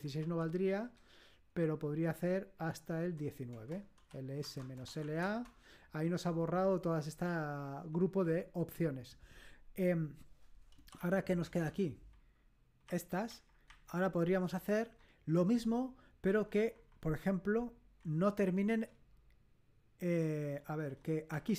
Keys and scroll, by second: 0.0 Left, 0.2 Delete, 0.5 Right, 0.8 Right, 1.6 Delete, 3.0-5.5 typing, 3.5 Return, 10.7-11.4 typing, 12.8 Up, 13.2 Up, 13.6 Up, 14.5 Left, 16.3 Left, 16.5 Left, 16.7 Left, 16.8 Left, 17.9 Left, 18.2 Left, 20.7 Left, 20.8 Left, 21.2 Delete.